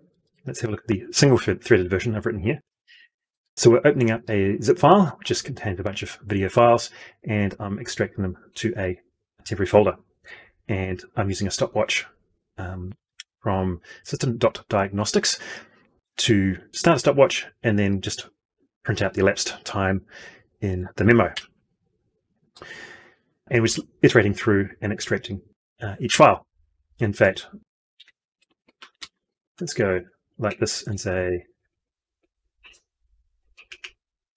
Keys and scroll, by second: 19.8 F12, 33.3 ctrl+c.